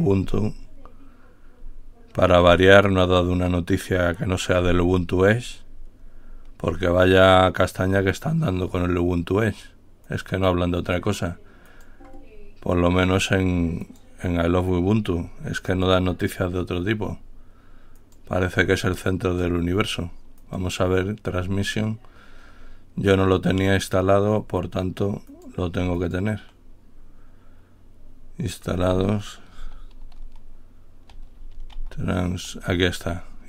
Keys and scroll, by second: 30.0-32.5 typing.